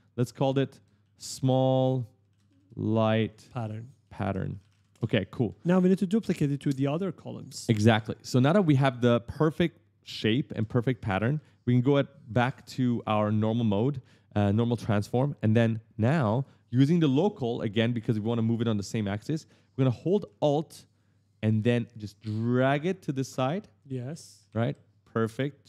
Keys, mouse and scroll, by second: 0.8 shift+s, 1.3 a, 2.3 shift+l, 3.3 h, 3.9 shift+p, 4.5 r, 4.7 Return, 6.0 right click, 11.1 w, 12.1 right click, 12.2 w, 12.5 a, 14.6-15.8 typing, 14.8 right click, 15.7 right click, 19.5 d, 21.1 alt+click, 23.1 right click, 24.2 right click.